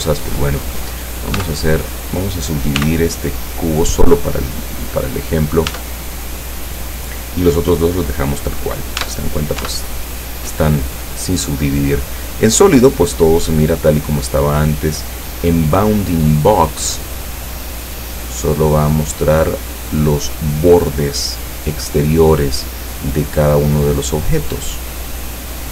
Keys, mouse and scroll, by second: 1.4 Tab, 2.9 w, 3.5 click, 5.8 Tab, 8.8 right click, 9.0 Tab, 9.7 Tab, 9.9 right click, 14.4 click, 16.9 click, 25.4 click.